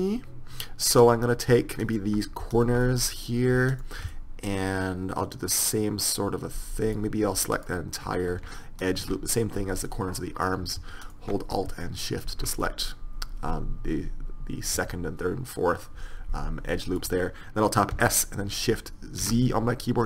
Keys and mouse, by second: 1.1-6.1 middle drag, 7.6-11.1 middle drag, 18.0 s, 18.1 middle click.